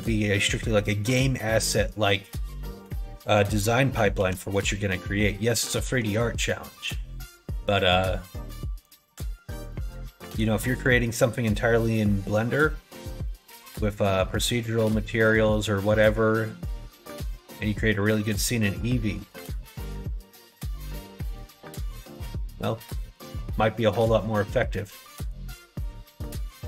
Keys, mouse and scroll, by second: 0.8 middle click, 1.8 middle click, 2.6 middle click, 3.4 middle click, 4.1 ctrl+b, 9.2 middle click, 9.7 middle click, 10.2 click, 12.7 middle click, 13.2 shift+middle click, 13.9 middle click, 14.8 middle click, 15.5 middle click, 16.9 shift+middle click, 18.9 middle click, 19.6 ctrl+z, 19.9 ctrl+z, 20.5 middle click, 21.5 middle click, 21.9 shift+middle click, 22.9 middle click, 23.9 middle click, 24.7 middle click, 25.8 3, 26.0 click, 26.4 middle click.